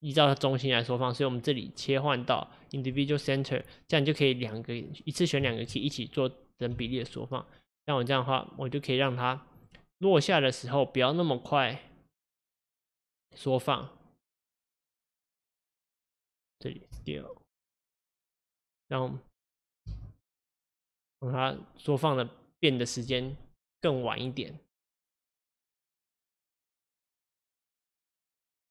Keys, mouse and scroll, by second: 4.6-6.8 drag, 6.8 s, 10.3-13.4 drag, 16.1 click, 17.0 s, 19.9 space, 27.7-28.7 middle drag.